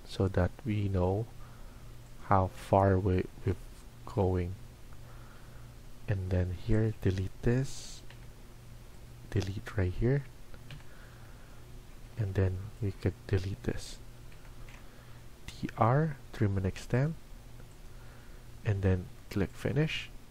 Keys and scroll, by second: 3.8 Escape, 4.2 Escape, 8.0 Delete, 16.3-17.0 typing.